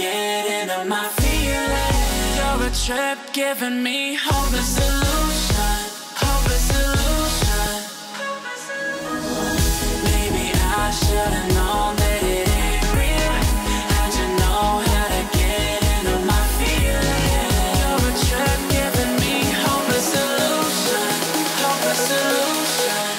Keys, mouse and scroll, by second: 0.2-0.7 shift+click, 2.1 click, 3.1-4.1 click, 5.2-5.6 click, 8.0-8.4 drag, 9.2 alt+scroll up 1, 9.9 drag, 11.3 alt+scroll down 1, 11.6 click, 11.9 alt+scroll up 1, 12.2 click, 13.0 alt+scroll down 1, 13.3 alt+scroll up 1, 14.4 F7, 15.2 click, 16.8 click, 17.8 click, 19.4 click, 19.8 alt+scroll up 1, 20.1 alt+scroll down 1, 20.4 click, 20.7 alt+scroll down 1, 20.9 click, 21.4 alt+scroll up 1, 21.9 click.